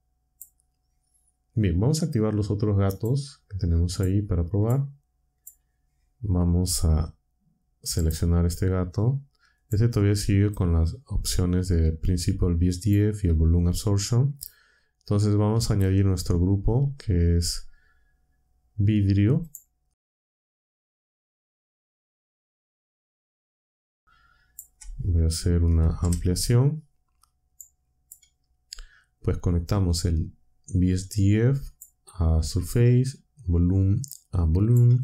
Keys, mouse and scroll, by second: 2.9 click, 3.9 click, 4.6 click, 5.3 click, 7.9 click, 9.6-10.6 drag, 12.0-13.0 drag, 16.1 shift+a, 19.4 click, 20.3 click, 20.6 click, 21.2 ctrl+click, 21.8-22.2 drag, 22.5 click, 23.3 click, 24.0 click, 26.0 Up, 27.5 click, 29.8-31.9 drag, 33.5-34.8 drag.